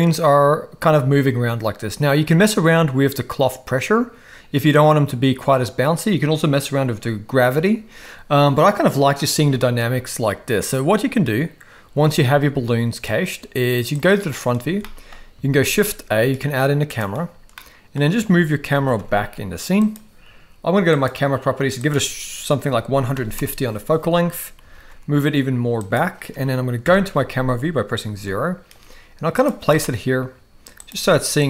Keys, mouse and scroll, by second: 12.0 space, 13.9 click, 14.8 shift+middle click, 15.5 shift+a, 17.5-18.0 middle drag, 18.7 g, 20.9 click, 21.9-23.4 drag, 24.6 g, 26.8 KP_0, 28.0 g, 29.6 g, 30.9 g.